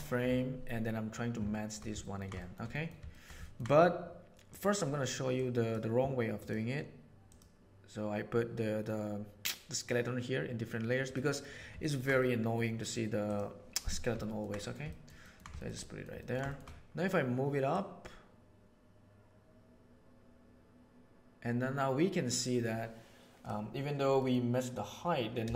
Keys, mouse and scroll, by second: 1.5 middle click, 2.0 middle click, 2.4 shift+middle click, 3.0 shift+middle click, 3.4 ctrl+middle click, 5.3-5.7 drag, 6.4 drag, 7.3 click, 11.8 ctrl+middle click, 12.1 middle click, 13.2 click, 14.2 ctrl+middle click, 14.6 middle drag, 14.9 ctrl+middle drag, 15.2 ctrl+middle drag, 15.5 shift+middle drag, 15.8 middle click, 16.4 shift+middle click, 17.7 right click, 21.1-23.4 middle drag, 24.1 middle click, 25.4-25.5 shift+middle drag.